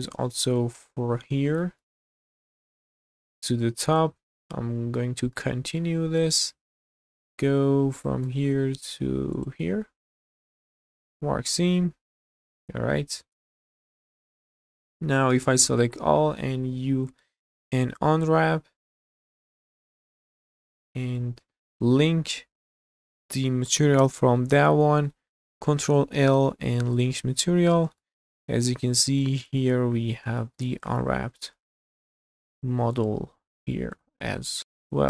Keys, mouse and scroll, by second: 1.0-1.5 scroll up 4, 1.6 shift+middle click, 2.0 middle click, 2.6 scroll up 2, 3.0 shift+middle click, 3.9 click, 4.3 click, 5.0 scroll down 1, 5.3 shift+middle click, 6.2 shift+middle click, 7.4 shift+middle click, 9.3 ctrl+click, 10.3 q, 11.0-11.4 scroll down 2, 11.5 click, 12.0 scroll down 1, 12.3 shift+middle click, 12.7-15.2 middle drag, 15.7 a, 16.7 u, 20.2 scroll down 2, 20.6 shift+middle click, 20.9 Tab, 21.1 click, 21.6 click, 22.8 shift+click, 25.4 ctrl+l, 27.3 click, 27.7 scroll up 2, 28.0 shift+middle drag, 28.4-29.0 middle drag, 29.2 shift+middle drag, 29.6-30.2 middle drag, 30.4 shift+middle drag, 30.8-31.4 middle drag, 31.7 shift+middle drag, 32.1-33.0 middle drag, 33.3 scroll up 1, 33.7 shift+middle drag, 34.2 scroll down 2, 34.4-35.0 middle drag.